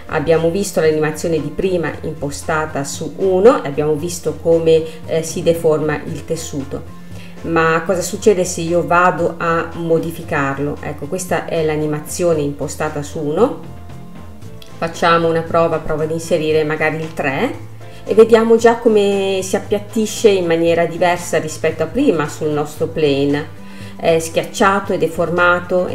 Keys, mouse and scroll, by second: 10.1 space, 11.9 space, 12.7-17.4 drag, 17.4 space, 19.8 space, 20.4 scroll down 1, 20.7-21.9 middle drag, 21.9 scroll up 3, 23.1-24.5 middle drag, 24.5 space.